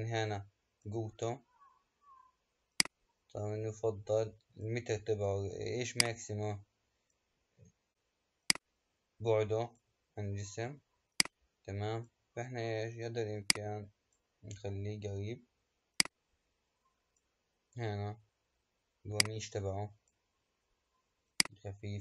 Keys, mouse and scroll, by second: 8.4-22.0 drag.